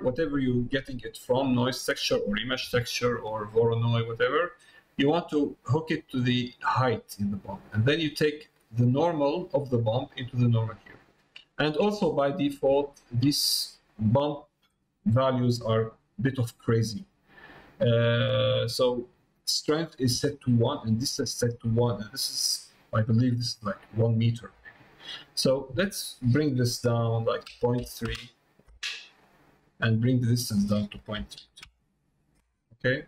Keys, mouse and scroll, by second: 11.1 middle click, 12.2 shift+middle click, 12.8 middle click, 14.3 click, 16.2-17.4 middle drag, 19.0 middle click, 25.9-28.7 drag, 30.4-32.3 drag.